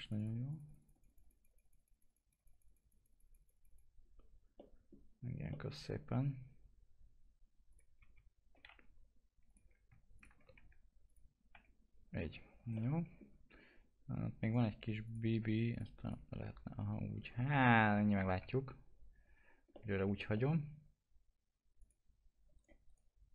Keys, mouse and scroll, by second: 4.6 middle click, 5.9-7.7 scroll up 1, 8.0 1, 8.7 F3, 9.5 click, 10.1 ctrl+click, 12.7-14.4 middle drag, 14.4 right click, 17.7-18.4 scroll down 1, 18.4 F4, 19.7 middle click, 20.0 F4, 20.3 middle click, 21.8 click, 22.5 right click.